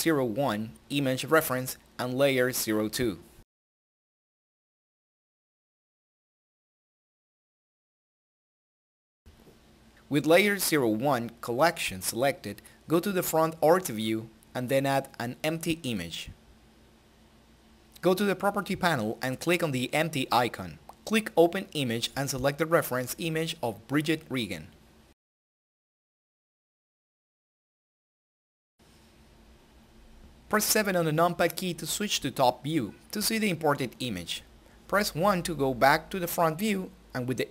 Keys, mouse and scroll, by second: 3.4 click, 3.6-7.8 typing, 8.0 Return, 12.4 Return, 12.5 shift+a, 16.3 click, 18.8 click, 24.5-25.9 drag.